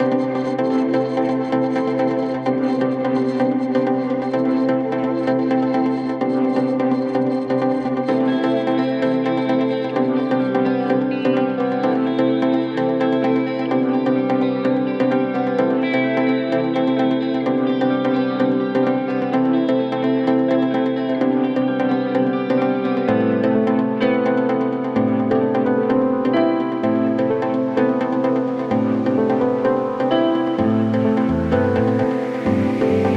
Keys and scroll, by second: 15.1 F3, 15.5 Escape, 18.6 shift+F2, 19.5 Escape, 23.0 ctrl+z, 23.5 Escape, 26.5 ctrl+z, 28.0 F3, 28.3 Escape.